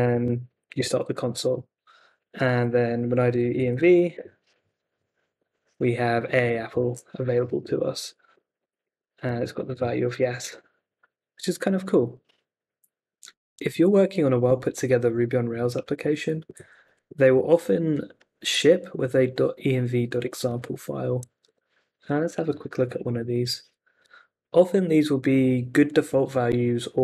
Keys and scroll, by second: 0.0-0.6 typing, 0.7 Return, 3.1-4.1 typing, 4.1 Return, 6.8 super+c, 8.1 Up, 8.3 [, 8.6 Left, 8.8 ', 9.3 Left, 9.5 super+v, 9.7 Return, 21.4 super+Tab.